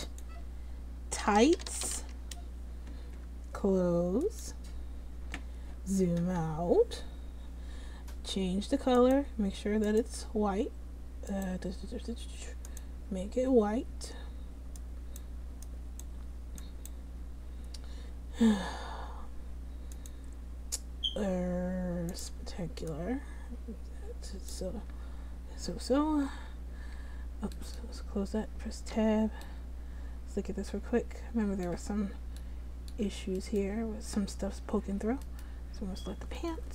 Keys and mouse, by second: 9.1-14.6 drag, 20.1-26.4 drag, 26.4 `, 27.0 `, 29.1 Tab, 33.6-34.9 drag.